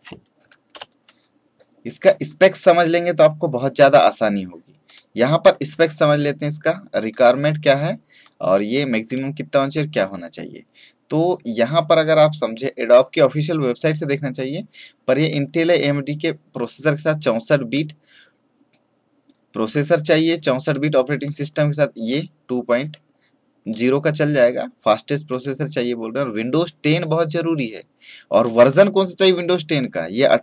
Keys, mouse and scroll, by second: 0.3 Right, 0.6 Return, 4.8 click, 7.0-11.1 drag, 15.2-30.4 drag.